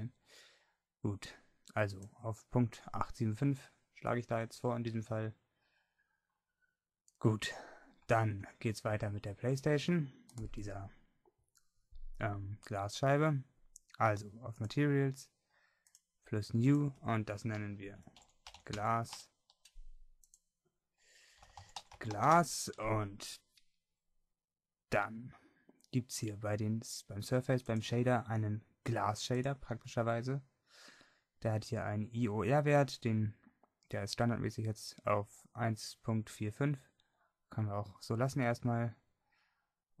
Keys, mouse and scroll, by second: 5.3-7.4 middle drag, 7.4-8.4 scroll up 2, 8.4 middle click, 20.3-27.8 drag, 35.4-40.0 drag.